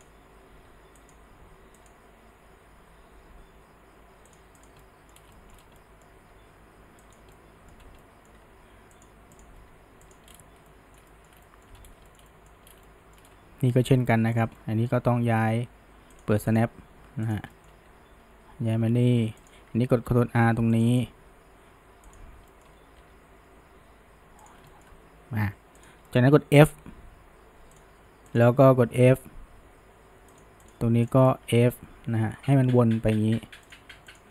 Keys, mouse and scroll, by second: 0.0 click, 0.5 g, 1.8 click, 3.0 g, 4.6 click, 4.8-5.2 middle drag, 5.2 scroll down 1, 5.4 shift+middle drag, 5.6 scroll up 1, 5.8 middle click, 6.2 g, 7.4 middle click, 7.8 scroll, 8.0-8.5 middle drag, 8.5 g, 9.4 click, 9.6 g, 10.7-11.8 shift+middle drag, 12.1-12.7 shift+middle drag, 12.9-13.3 shift+middle drag, 13.3-14.4 scroll, 14.4 click, 14.6-16.2 middle drag, 16.2 click, 16.5 click, 17.3 click, 17.5-17.9 middle drag, 17.9 g, 20.9 right click, 22.1 click, 22.5 middle click, 23.0 g, 24.7-25.8 shift+middle drag, 25.8 drag, 26.1-26.6 middle drag, 26.6 f, 28.3 click, 29.0 f, 30.7 click, 31.5 f, 34.1 shift+click.